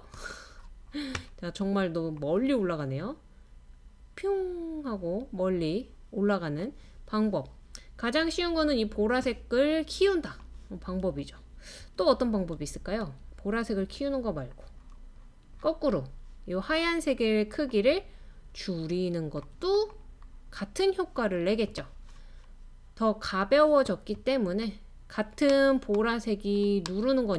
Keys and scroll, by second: 12.0 super+z, 12.6 super+z, 13.0 super+z.